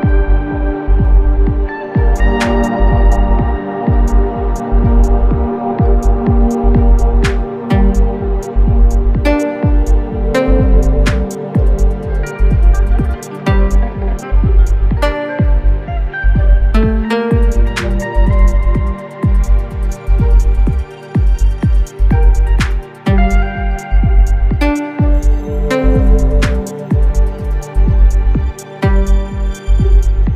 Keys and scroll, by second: 5.7 BackSpace, 24.7 i, 26.2 v, 28.5 i, 29.7 v.